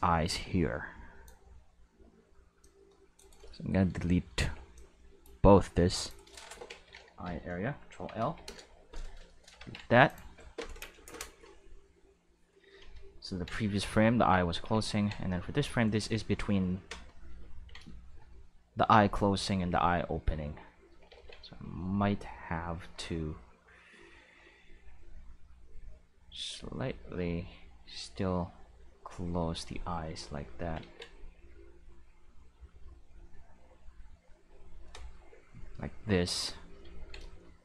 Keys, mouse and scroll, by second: 2.6-3.3 drag, 3.1 right click, 3.6 shift+middle click, 4.3 c, 4.7-5.2 drag, 5.9 click, 6.1 right click, 7.2 ctrl+l, 8.2 x, 8.4 Return, 9.3 middle click, 9.6 ctrl+Tab, 10.0 click, 14.2 ctrl+Tab, 14.6 ctrl+Tab, 15.3 click, 19.7-20.8 drag, 21.1 ctrl+z, 23.9-28.8 drag, 29.6 click, 30.8 ctrl+z, 31.3 click, 32.2-33.3 drag, 34.1 click, 35.4-37.1 shift+middle drag.